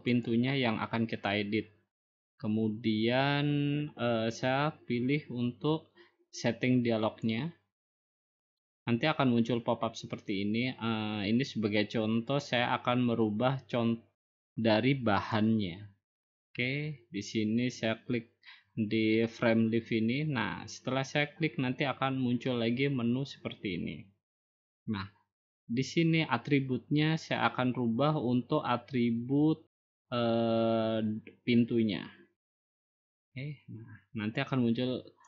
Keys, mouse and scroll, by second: 1.7-7.4 drag, 8.7-12.5 drag, 16.8-17.9 drag, 23.6 middle click, 23.7-24.8 scroll up 4, 24.9 scroll down 1, 34.0 click, 35.0 click.